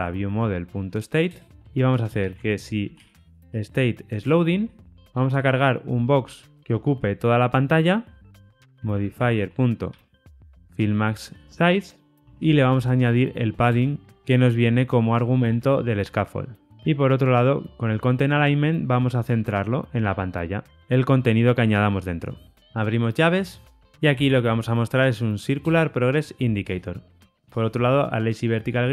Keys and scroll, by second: 1.2 Return, 1.6 Escape, 4.2 Return, 6.5 Return, 11.6 Return, 13.7 Return, 15.3 Return, 18.3 Return, 19.9 Return, 20.8 alt+Return, 25.6 Return.